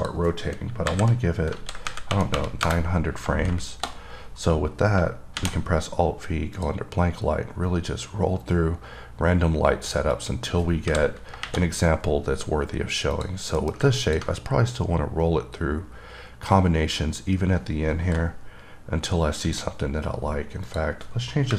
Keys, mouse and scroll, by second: 0.2 click, 6.8 click, 7.5-8.9 scroll up 6, 8.9-9.8 scroll up 2, 9.8-10.4 scroll down 1, 10.4 click, 13.4 click, 14.3 click, 14.6-15.2 scroll up 2, 15.7 scroll up 1, 16.5-18.6 scroll up 1, 19.7 click, 20.9 click.